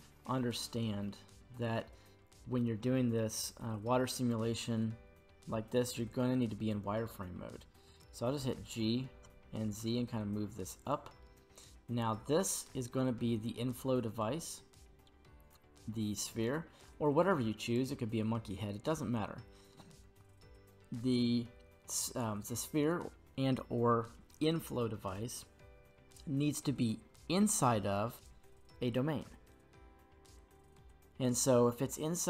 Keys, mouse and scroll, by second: 0.6 middle click, 8.4 g, 9.2 z, 10.8-11.2 drag, 11.2-12.0 middle drag, 15.8 g, 17.6 right click, 18.9 middle click, 21.3-24.1 middle drag, 28.1 right click, 29.3 g, 30.3 right click, 30.7-32.2 middle drag.